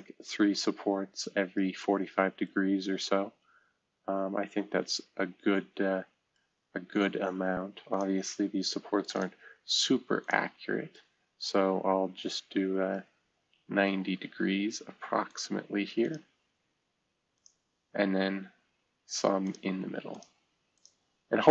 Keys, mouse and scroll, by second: 0.3-1.6 middle drag, 2.4-6.4 right drag, 7.9 click, 9.1 click, 10.2 click, 10.9-12.9 middle drag, 15.3 click, 16.0 click, 17.3 click, 19.4 click, 20.1 click, 20.7 click.